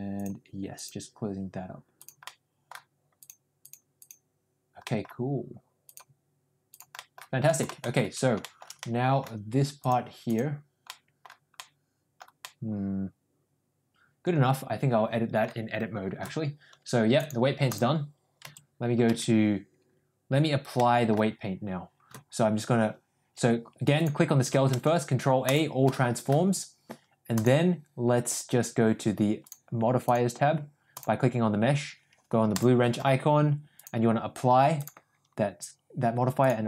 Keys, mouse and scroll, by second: 0.1 click, 0.7 click, 1.9 click, 2.2 middle click, 3.1 click, 3.6 click, 3.9 click, 4.8 middle click, 5.8 click, 6.6 click, 6.9 middle click, 7.4 middle click, 7.8 shift+middle click, 8.3 shift+middle click, 8.7 middle click, 9.7 click, 10.2 click, 10.7 middle click, 11.5 middle click, 12.3-15.3 middle drag, 17.1 click, 18.3 Tab, 19.0 Tab, 20.6-21.1 middle drag, 24.6 ctrl+a, 25.8 middle click, 29.9 click, 30.8 click, 32.4 click, 33.7-34.9 drag, 36.3-36.6 drag.